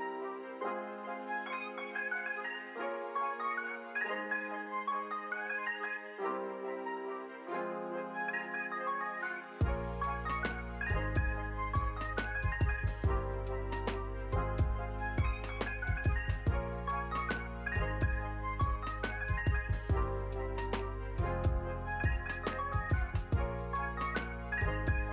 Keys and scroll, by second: 9.3 ctrl+c, 9.6 ctrl+v, 15.0 space, 18.1 space, 20.1 space.